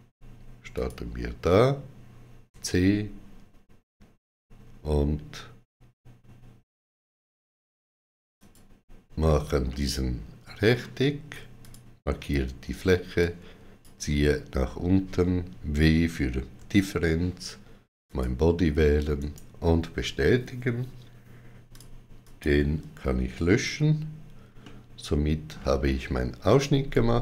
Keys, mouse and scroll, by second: 0.6 click, 2.3 c, 8.2 click, 9.5 middle click, 11.4 click, 11.4 click, 13.0 click, 16.4 w, 17.9 click, 19.0 right click, 21.6 click, 22.1 click, 22.1 click, 23.5 x, 24.5 middle click.